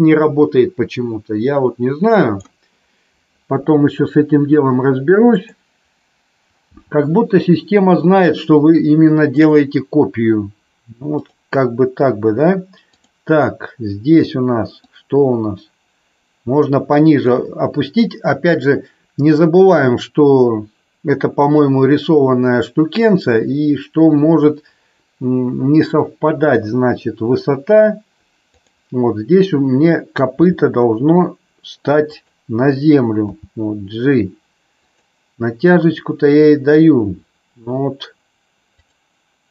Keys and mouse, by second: 5.5 click, 6.6 g, 11.1 click, 14.9-17.2 drag, 28.5 click, 30.3 r, 32.1 click, 33.3 g, 38.6 click.